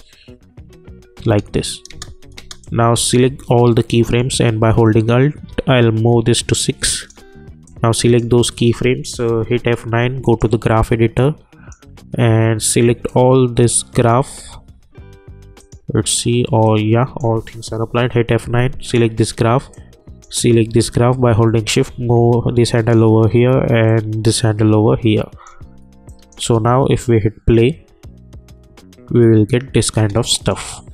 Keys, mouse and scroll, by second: 2.6-4.2 drag, 4.2-9.4 alt+drag, 9.4 F9, 10.2 click, 17.8 F9, 18.8 click, 23.9 click, 26.1 click, 26.4 space, 29.9 space, 30.5 click.